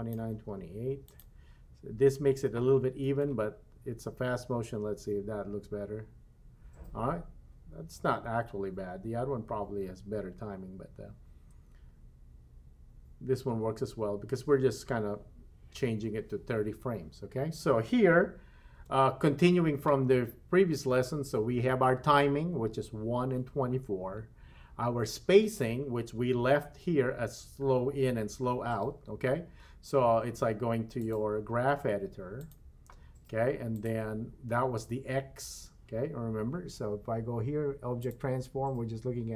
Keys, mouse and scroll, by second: 0.3 g, 3.1 space, 18.9 space, 31.0-32.6 drag, 33.7 click, 38.0 click.